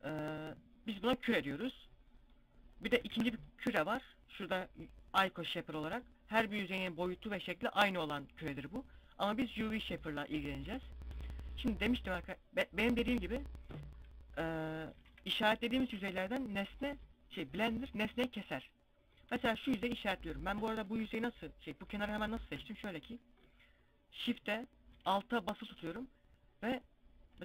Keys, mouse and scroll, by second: 2.5 shift+a, 10.4 a, 10.9 middle click, 13.1 scroll up 2, 14.3 KP_7, 14.4 KP_5, 15.0 z, 17.2 alt+shift+right click, 18.0 middle click, 18.0 scroll up 1, 18.7 z, 18.9 scroll down 2, 19.3 middle click, 19.8 scroll up 1, 20.4 KP_7, 20.6 KP_5, 21.0 KP_5, 22.0 a.